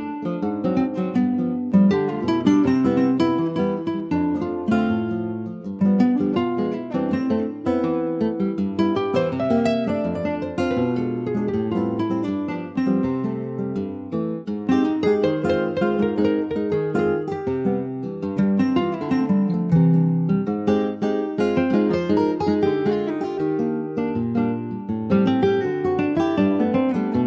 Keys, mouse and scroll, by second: 0.0 scroll down 5, 0.3 middle click, 0.8 ctrl+s, 0.9 click, 1.4 middle click, 1.5 scroll up 1, 1.8 ctrl+s, 2.2 click, 3.9-5.1 shift+middle drag, 5.1 s, 11.2-11.8 scroll down 2, 11.8 scroll down 1, 11.9 Tab, 12.2 click, 12.7 ctrl+s, 13.0 middle click, 13.3 scroll up 1, 13.6 click, 13.9-14.2 scroll up 1, 14.2 Tab, 14.4 click, 15.3 click, 16.1 ctrl+a, 17.0 middle click, 17.4 ctrl+s, 17.6-18.7 shift+middle drag, 18.7 click, 18.9-21.7 right drag, 21.7 middle click, 22.6 click, 24.0 ctrl+s, 24.2-26.0 middle drag, 26.0 click.